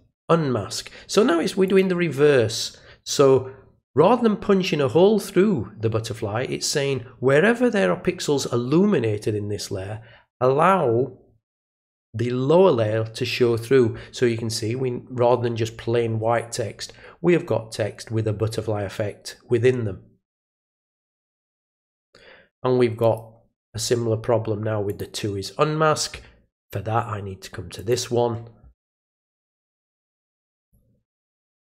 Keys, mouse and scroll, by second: 1.6 click, 21.8 click, 23.0 click, 24.9 click, 27.7 click, 29.1 click, 30.6 click.